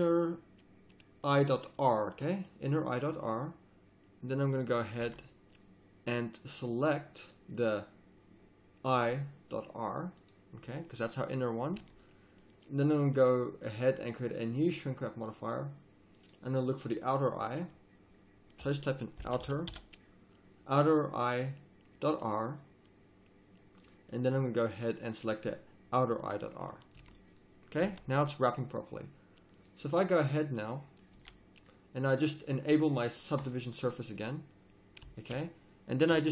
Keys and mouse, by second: 5.0 z, 11.2 middle click, 11.7 z, 13.7-18.5 drag, 24.1-26.7 drag, 26.9 z, 27.8 z, 29.5-31.1 drag, 31.1 a, 31.2 click, 34.1 middle drag.